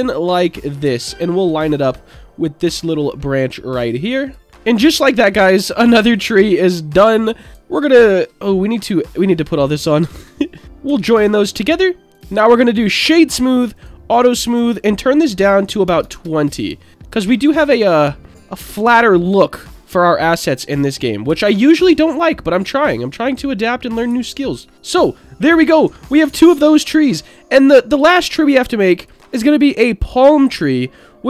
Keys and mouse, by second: 1.0 alt+middle click, 2.0 click, 3.4 click, 4.4 Tab, 4.9-5.3 middle drag, 9.5 click, 10.1-10.6 drag, 10.8 ctrl+j, 13.7 click, 14.5-16.6 drag, 16.9-17.3 middle drag, 18.0-18.3 middle drag, 19.0 shift+middle drag, 21.3 s, 22.1 click, 22.1 s, 22.8 click, 24.1 s, 24.5 drag, 24.7 click, 26.3 ctrl+z, 26.7 middle drag, 27.6-29.1 drag, 29.4-30.6 drag.